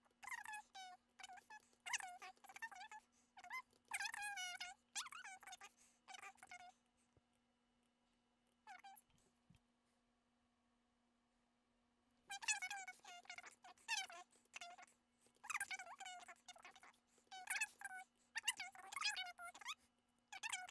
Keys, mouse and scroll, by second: 1.3 shift+middle click, 1.6 shift+middle click, 1.7 shift+middle click, 2.2 shift+middle click, 2.4 shift+middle click, 3.6 shift+middle click, 4.0 middle click, 12.8 shift+middle click, 12.9 shift+middle click, 13.1 shift+middle click, 13.2 shift+middle click, 13.5 shift+middle click, 13.9 shift+middle click, 14.1 shift+middle click, 14.2 middle click, 14.3 shift+middle click, 15.3 shift+middle click, 15.8 shift+middle click, 16.7 shift+middle click, 16.9 middle click, 17.3 shift+middle click.